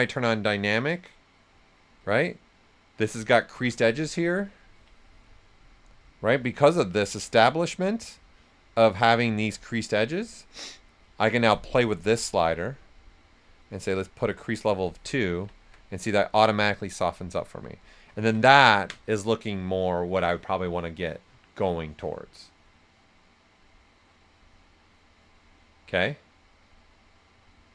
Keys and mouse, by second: 0.4 right click, 1.8 shift+f, 4.9 ctrl+right click, 9.2 shift+click, 12.0-15.1 drag, 15.1 ctrl+right click, 16.6 right click, 17.7 typing, 18.1 ctrl+alt+right click, 18.4 right click.